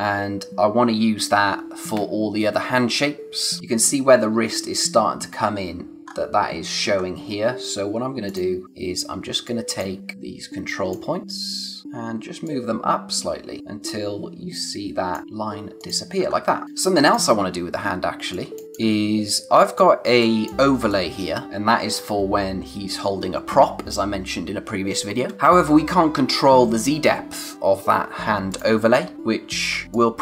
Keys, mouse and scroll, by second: 3.3 scroll up 1, 6.0-6.8 scroll up 1, 6.8-7.7 scroll down 1, 8.2 click, 8.6-9.3 scroll down 1, 9.3 space, 9.4 click, 9.8 space, 10.1 click, 11.8-12.4 scroll down 1, 12.4 click, 16.2-16.6 scroll down 1, 16.6 space, 17.0 click, 18.6 space, 19.5 click, 20.1 space, 20.2 click, 21.4-22.7 scroll up 1, 25.3 space, 28.7 space, 28.9 click, 29.1 scroll down 1, 29.8 scroll up 1, 29.8 space.